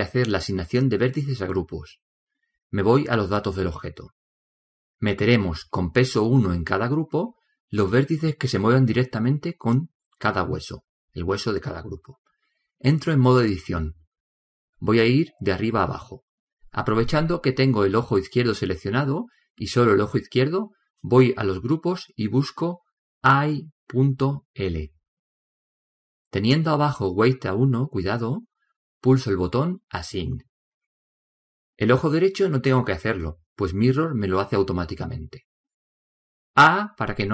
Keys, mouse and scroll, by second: 4.9-6.7 drag, 6.9-9.5 drag, 9.5-12.8 middle drag, 12.8 scroll up 1, 13.0 middle click, 14.3-16.1 drag, 19.0-20.8 drag, 20.9-22.4 drag, 23.7-25.6 drag, 30.6-32.4 drag.